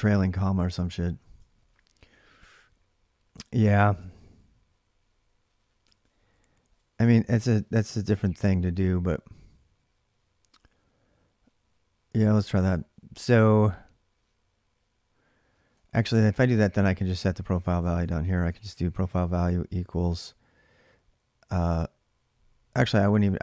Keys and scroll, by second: 0.0-1.9 typing, 3.8 ctrl+[, 3.9 ctrl+j, 3.9 k, 5.6-7.2 typing, 11.9 j, 12.1 j, 15.3-19.2 typing.